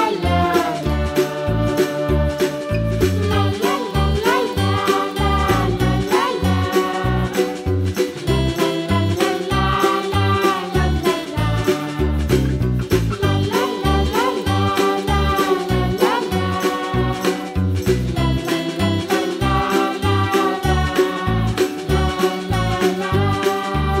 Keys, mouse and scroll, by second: 0.1 shift+click, 0.8-2.1 middle drag, 2.1 e, 3.4 middle click, 3.7 scroll up 2, 3.8 middle click, 4.1 KP_Decimal, 4.5 scroll down 1, 4.6 middle click, 4.9 click, 5.5 shift+click, 5.6 shift+click, 6.1 Delete, 6.8-8.0 middle drag, 8.8 2, 9.1 click, 9.4 shift+click, 9.7 shift+click, 10.4 shift+click, 10.6 shift+click, 10.8 shift+click, 11.1 shift+click, 11.4 middle click, 11.9 g, 14.0 click, 14.3 click, 15.1 g, 17.1-17.7 scroll up 4, 17.7 click, 18.0 middle click, 18.4 scroll down 1, 18.7 shift+click, 19.0 shift+click, 19.2-20.2 middle drag, 20.2 click, 20.7 g, 23.4-24.0 scroll down 3.